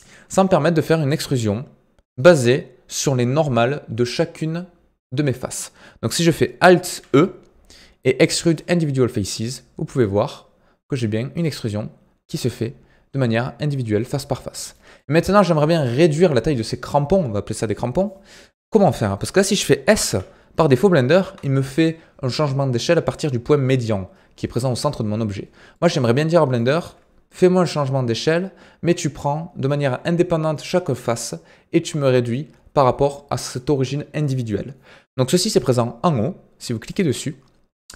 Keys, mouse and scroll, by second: 7.0 alt+e, 11.6-20.0 middle drag, 20.0 s, 25.7-36.8 middle drag, 36.8-37.9 drag.